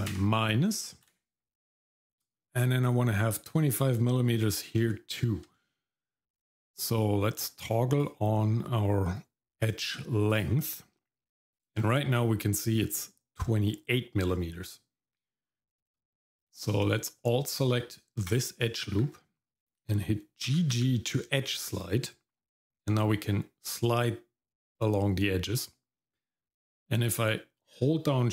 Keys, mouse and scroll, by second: 2.1 middle click, 2.5-2.9 scroll up 2, 2.9 middle click, 4.4-4.8 scroll up 2, 4.8 shift+middle click, 5.7 middle click, 6.0 middle click, 7.9-10.7 drag, 11.7-14.3 scroll up 4, 14.3-15.2 scroll down 1, 15.4-16.3 scroll down 1, 18.3 alt+click, 20.5 g.